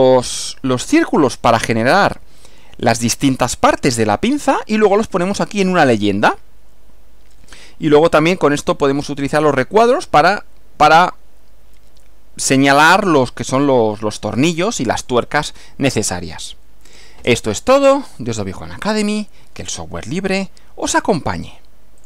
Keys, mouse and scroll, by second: 19.0 click, 22.0 click.